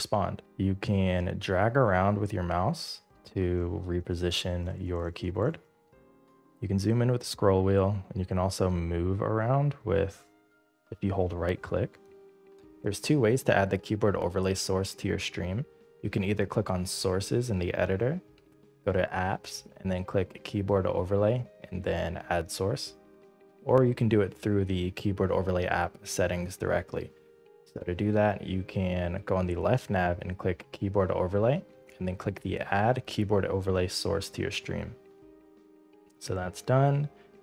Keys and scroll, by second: 1.6 space, 3.7 space, 5.1 space, 5.9 space, 10.9 space.